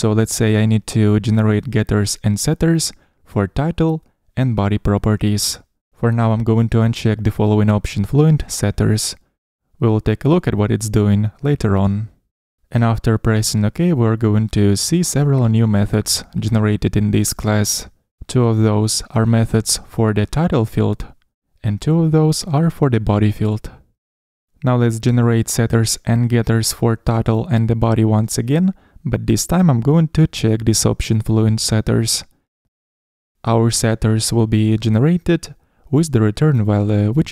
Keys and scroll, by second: 13.2 Down, 13.3 shift+Up, 15.2 Escape, 27.6 super+n, 34.9 shift+Down.